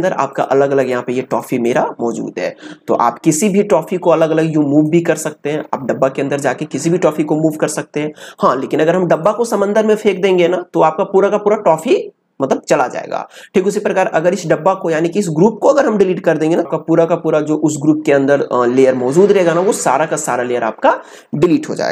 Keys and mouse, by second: 7.1 click, 15.2-16.7 drag.